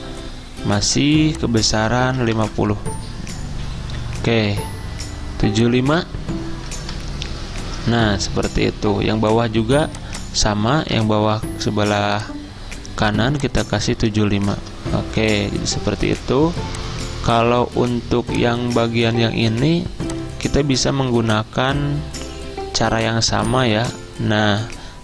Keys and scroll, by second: 2.0-2.7 typing, 5.6-7.2 typing, 7.8 Return, 11.2 ctrl+c, 14.4 ctrl+v, 14.6 Return.